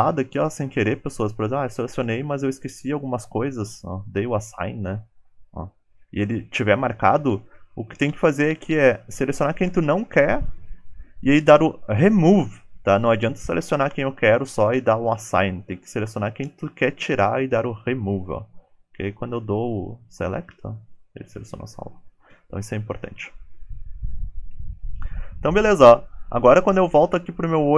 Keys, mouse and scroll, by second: 3.2 shift+click, 23.9 alt+z, 24.6 click.